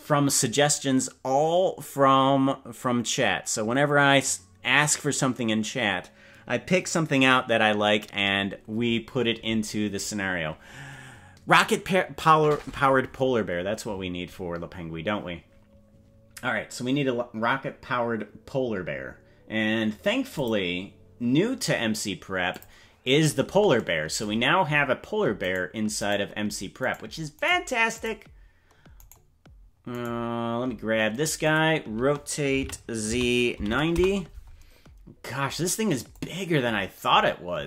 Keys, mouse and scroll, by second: 18.9-20.3 scroll down 4, 20.4 click, 22.5 click, 25.5 right click, 26.0 right click, 26.9 right click, 27.4 right click, 29.0 right click, 30.0 right click, 31.4 click, 32.6 r, 36.1-37.6 drag.